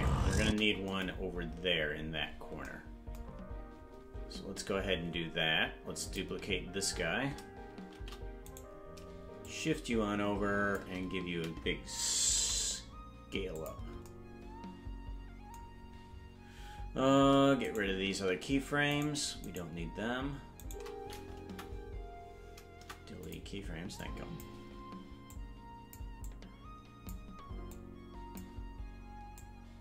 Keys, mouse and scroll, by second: 0.4 space, 1.1-2.6 scroll down 25, 3.3-3.6 scroll up 4, 4.1 scroll down 1, 6.0 click, 8.0 shift+d, 9.4-10.8 shift+drag, 12.3 s, 17.6 right click, 18.9 shift+right click, 19.3 shift+right click, 21.4 Delete, 22.7 Delete, 24.0 click, 25.2 click, 26.2 click, 27.7 click, 29.4 click.